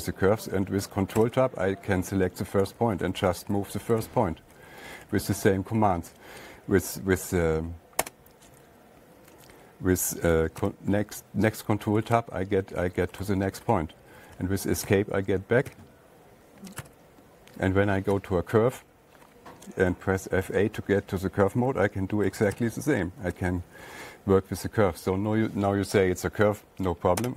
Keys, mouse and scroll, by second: 1.4 Tab, 3.5 Up, 3.8 Up, 4.0 Up, 4.0 Up, 4.2 Up, 4.4 Up, 5.0 Down, 5.2 Down, 5.4 Down, 5.5 Down, 5.7 Right, 5.9 Right, 6.1 Right, 11.1 ctrl+Tab, 12.2 Down, 12.4 Down, 12.6 Down, 13.2 Down, 13.4 Down, 13.6 Down, 14.2 Up, 14.4 Up, 14.6 Up, 15.3 Escape, 16.2 Escape, 17.2 Tab, 18.6 Tab, 20.9 F8, 23.0 ctrl+Tab, 24.3-25.1 Up.